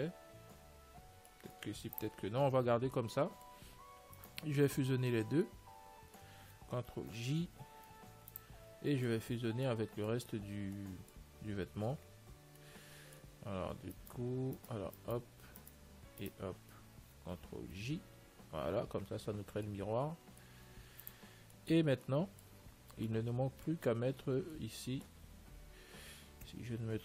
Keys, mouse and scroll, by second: 2.1 ctrl+s, 2.9-4.7 middle drag, 4.7-6.2 right drag, 5.8-7.7 middle drag, 7.4 ctrl+j, 8.5 ctrl+s, 8.9-11.6 middle drag, 12.8-14.8 middle drag, 14.4-18.4 right drag, 18.1 ctrl+j, 19.7-26.7 middle drag, 21.2 ctrl+s.